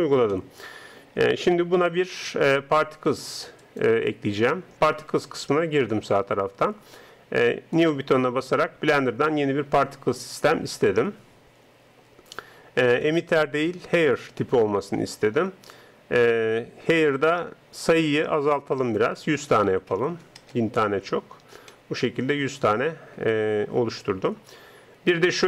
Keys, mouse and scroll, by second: 0.6-10.2 drag, 13.1-21.4 drag, 20.1 KP_0, 21.6-22.9 middle drag.